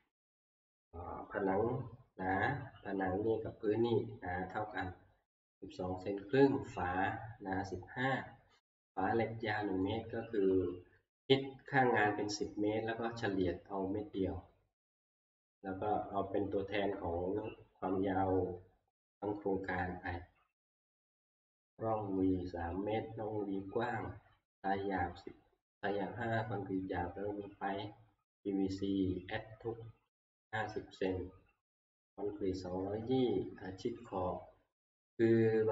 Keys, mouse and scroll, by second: 0.0-0.2 typing, 9.9-10.7 scroll, 11.8-12.6 scroll, 14.9-16.0 scroll, 16.5 scroll, 16.7 middle click, 20.3 scroll up 5, 20.4 scroll, 21.5 middle click, 28.3 middle click, 30.3 click, 30.4 click, 34.0 click.